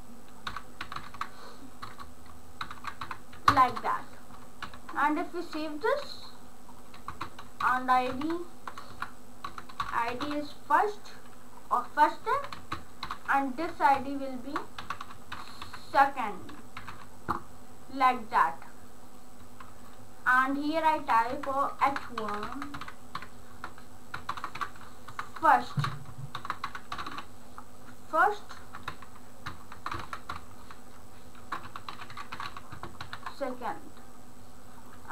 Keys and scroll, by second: 0.4-3.5 typing, 4.6 ctrl+s, 7.1-10.8 typing, 8.9 Left, 12.4 Left, 12.6-17.4 typing, 21.0 Tab, 21.3 Tab, 21.9-27.7 typing, 28.9 shift+Tab, 29.4-33.0 typing, 33.0 ctrl+s, 35.0-35.1 typing.